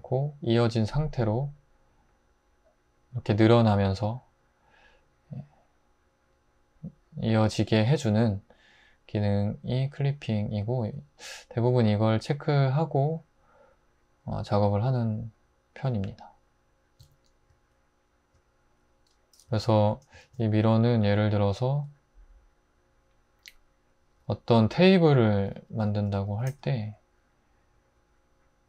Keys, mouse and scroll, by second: 10.8 Tab, 11.6 Tab, 17.0 `, 19.5 x, 20.3 shift+a, 25.8 Tab, 26.3 typing.